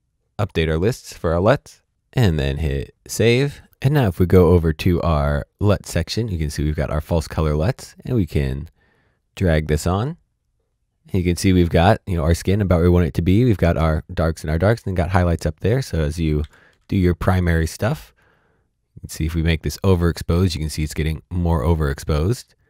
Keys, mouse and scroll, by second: 0.3 click, 2.3 click, 5.5 click, 9.5 click, 10.2 click, 15.8 click, 16.4 shift+s, 17.0 click, 19.0-21.5 scroll up 1, 21.5-22.4 scroll down 1, 22.4 click.